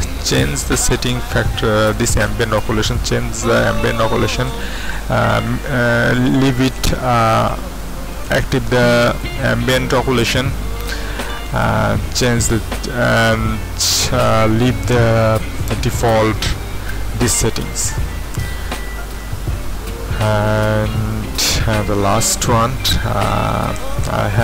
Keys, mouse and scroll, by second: 1.9 click, 3.5 KP_1, 4.1 Return, 4.9 Return, 4.9 KP_1, 8.1 click, 23.8 shift+F3.